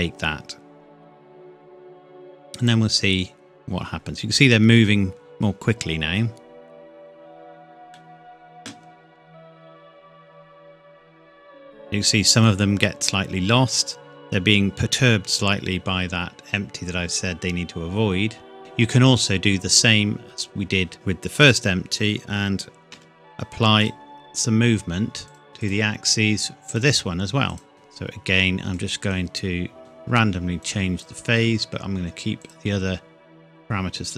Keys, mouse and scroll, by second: 2.6 click, 7.0 click, 7.9 middle click, 9.3 KP_1, 10.8-12.6 scroll down 1, 18.6 click, 20.9 click, 23.8 click.